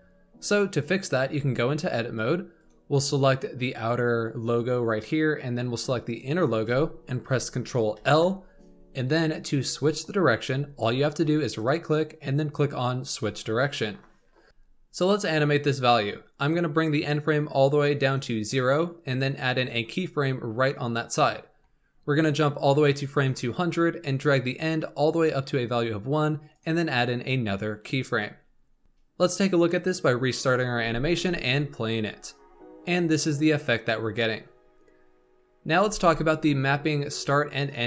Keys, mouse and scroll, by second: 1.1 Tab, 2.5 click, 6.0 shift+click, 7.9 ctrl+l, 11.5-14.5 right drag, 14.5-16.4 shift+middle drag, 16.4-19.4 drag, 19.5 click, 22.8-26.6 drag, 28.8-30.7 drag, 30.7 space, 35.7 space.